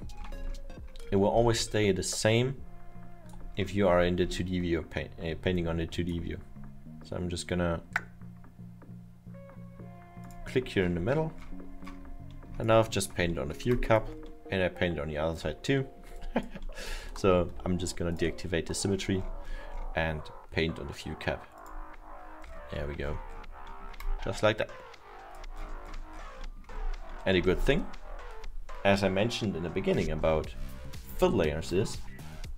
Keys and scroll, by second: 17.3 ctrl+z, 19.5 7, 27.3 alt+7.